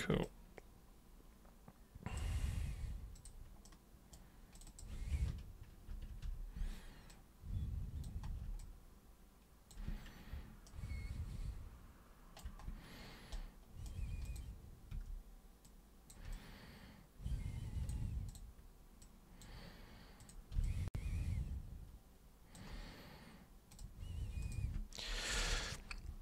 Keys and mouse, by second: 0.3-2.2 alt+super+drag, 3.2 super+click, 3.7 super+right click, 4.5 super+click, 4.7 super+click, 5.9 ctrl+super+e, 6.3 super+r, 7.1-8.1 super+drag, 8.6-9.7 alt+super+drag, 10.7-12.4 shift+right drag, 13.3 right click, 14.3 click, 14.9 w, 15.7 click, 16.4-17.9 alt+drag, 18.3 super+click, 19.1 super+click, 20.2 super+click, 20.6-22.5 alt+super+drag, 23.7 super+click, 24.4 super+click, 25.3 super+Return.